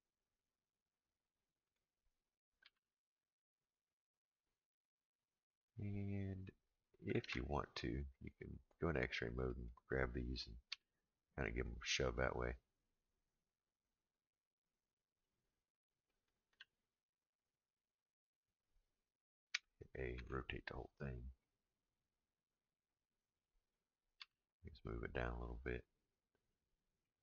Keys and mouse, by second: 2.6 g, 7.2 alt+z, 9.5 click, 10.7 g, 16.1 click, 16.5 g, 19.5 a, 20.1 r, 24.2 g, 27.0 middle click.